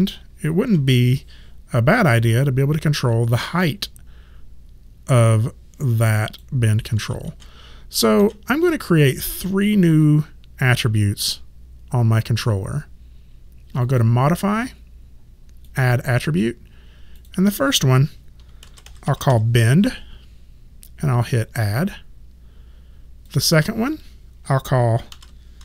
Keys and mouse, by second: 0.7 w, 2.4 click, 7.0 ctrl+z, 9.3 click, 13.8 click, 18.4-19.8 typing, 21.6 click, 24.9-25.6 typing.